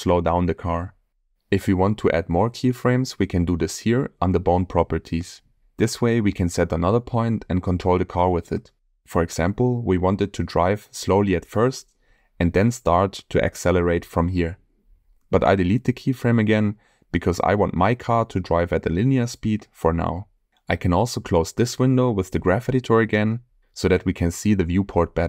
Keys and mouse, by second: 1.9-3.1 drag, 6.1 click, 7.8-8.2 drag, 8.9 g, 15.2-17.6 drag, 17.6 Delete, 20.0-20.9 drag, 22.6 click, 24.5 click.